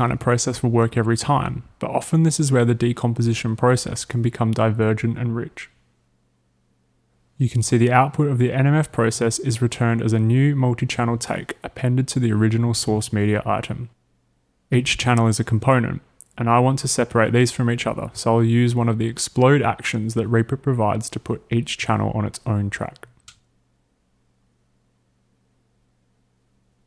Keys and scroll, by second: 25.0 space.